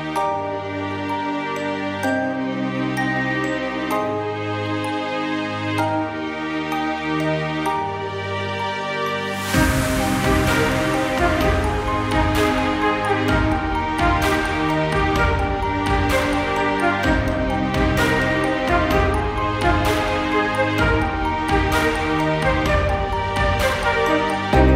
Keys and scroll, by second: 5.1 ctrl+j, 8.3 ctrl+t, 11.8 ctrl+t, 13.8 ctrl+t, 20.9 ctrl+t.